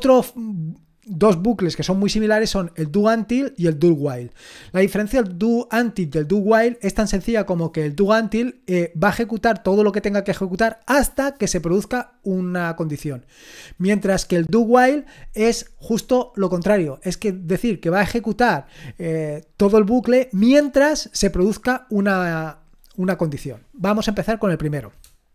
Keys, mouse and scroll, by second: 4.2-25.0 scroll down 1, 25.0-25.3 scroll down 1.